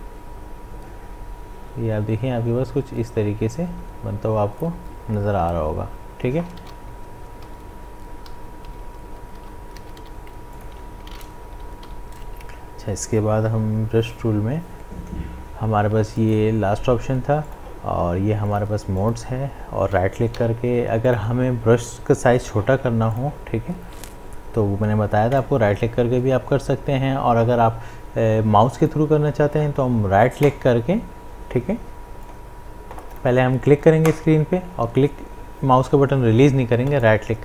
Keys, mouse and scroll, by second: 6.4 ctrl+d, 6.6 v, 8.8 ctrl+z, 9.4 d, 10.0 v, 10.5 click, 11.9 m, 13.5 b, 16.2 click, 20.3 v, 21.0 click, 22.4 b, 23.1 click, 25.5 right click, 28.8 click, 30.4-33.1 right drag, 33.1-36.9 drag, 36.9-37.4 right drag.